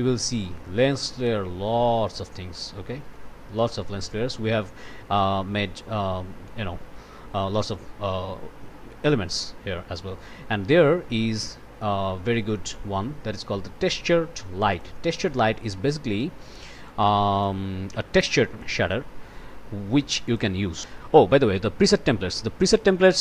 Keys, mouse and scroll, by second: 14.7 click, 16.9 click, 18.2 click, 20.1 click.